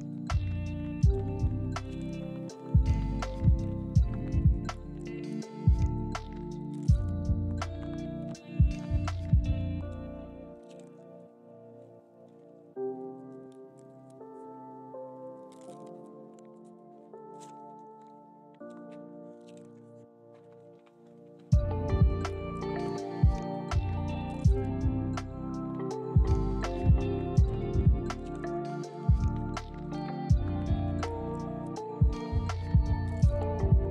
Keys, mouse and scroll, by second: 0.5 middle click, 1.5 s, 1.6 y, 3.7 middle click, 6.0 middle click, 6.2 middle click, 6.7 shift+click, 6.9 middle click, 7.3 shift+click, 7.5 middle click, 7.8 middle click, 7.9 shift+click, 8.1 middle click, 8.9 KP_1, 9.4 g, 10.3 ctrl+click, 10.5 middle click, 11.2 middle click, 11.5 shift+click, 11.7 shift+middle click, 12.3 1, 12.8 g, 13.7 ctrl+click, 14.5 shift+click, 15.1 j, 15.7 shift+click, 15.8 j, 16.1 middle click, 17.5 shift+click, 17.6 j, 18.0 middle click, 18.3 scroll down 1, 18.4 middle click, 20.5 ctrl+click, 21.6 alt+click, 22.9 s, 23.9 x, 24.3 0, 25.4 alt+click, 26.0 s, 26.1 x, 26.4 0, 26.8 middle click, 28.2 scroll down 1, 28.4 middle click, 29.7 scroll up 1, 29.9 shift+middle click, 30.1 shift+middle click, 30.5 scroll down 1, 30.7 scroll up 1, 30.9 middle click, 33.0 Delete, 33.6 middle click.